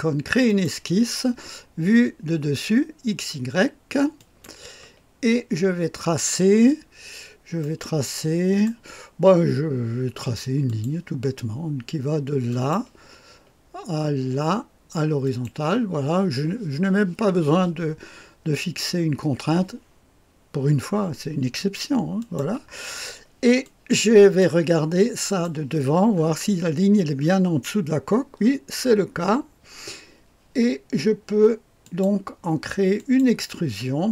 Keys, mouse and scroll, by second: 0.5 click, 4.2 click, 5.7-6.6 scroll up 1, 6.8-7.6 scroll down 2, 7.6-9.2 right drag, 10.6 click, 12.5 click, 15.2 click, 22.2 click, 23.6 click, 25.3 click, 26.1-26.9 scroll up 1, 27.2-28.3 scroll up 1, 28.3-30.5 scroll down 2, 31.8 click, 33.0 click.